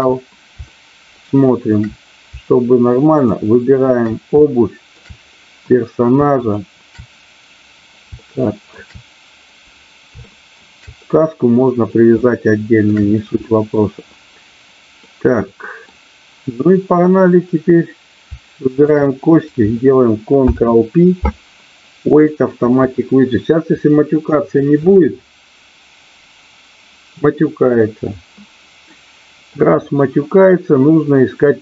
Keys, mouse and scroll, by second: 0.7-1.7 shift+middle drag, 3.1 shift+click, 4.3 shift+middle click, 6.3 shift+click, 8.2 shift+middle click, 10.2 shift+middle click, 12.2 shift+middle click, 15.1 middle click, 18.7 shift+click, 20.4 ctrl+p, 28.8 middle click.